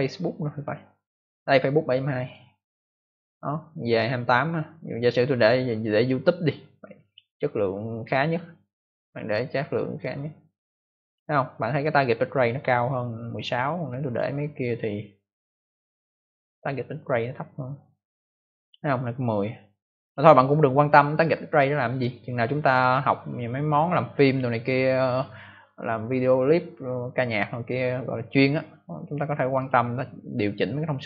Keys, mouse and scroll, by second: 2.1 click, 2.2 click, 5.3 click, 5.4 click, 6.9 click, 7.1 click, 9.0 click, 14.0 click, 14.1 click, 15.9 click, 15.9 click, 17.5 click, 20.0 click, 20.0 click, 29.5 click, 29.6 click, 30.9 click.